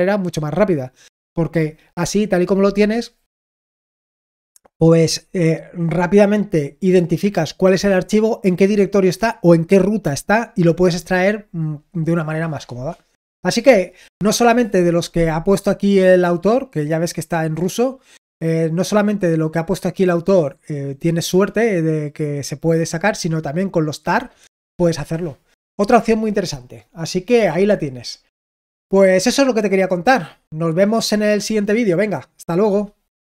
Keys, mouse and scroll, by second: 16.8-17.2 scroll up 2, 17.2-33.2 scroll down 2, 33.2 click.